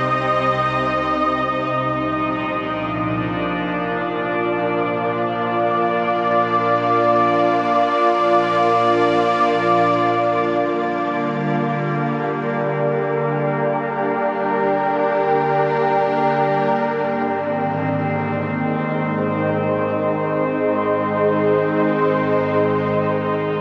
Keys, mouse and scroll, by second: 3.2 z, 3.4 click, 3.6 space, 3.7 click, 3.8 z, 4.4 click, 6.0-10.0 alt+shift+drag, 11.2 ctrl+g, 12.3 shift+click.